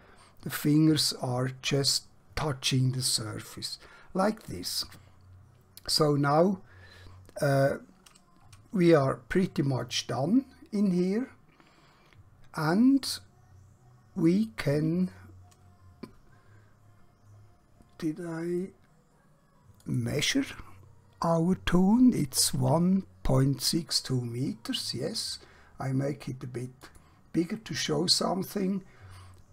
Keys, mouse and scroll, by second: 6.9-7.3 scroll down 1, 7.7-8.1 scroll up 1, 9.3-9.7 scroll down 1, 12.1-12.5 scroll up 1, 13.1-13.6 scroll down 1, 13.6 scroll up 1, 13.9-14.7 scroll down 1, 19.7 click, 26.7 click.